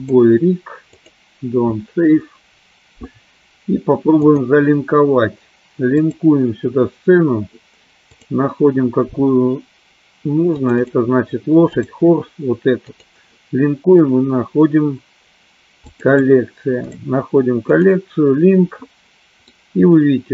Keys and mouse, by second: 4.5-6.6 drag, 19.6 middle click.